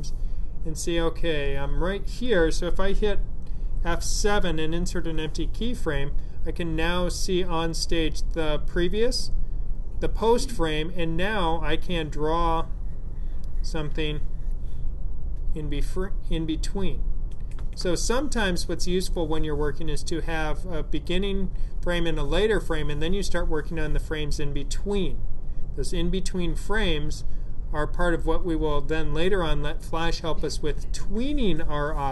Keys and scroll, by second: 4.5 F7.